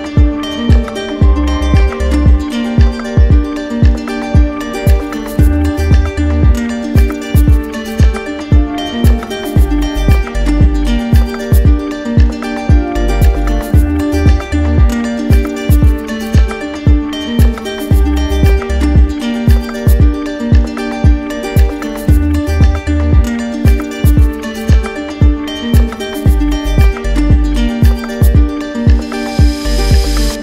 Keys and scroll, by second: 16.3 ctrl+z.